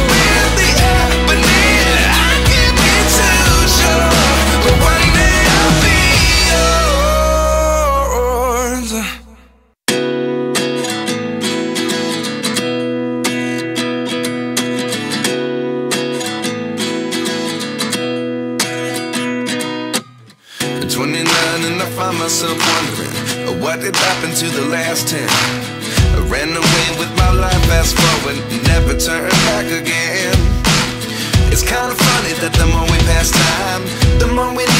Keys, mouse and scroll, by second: 0.0 e, 7.2 scroll down 1.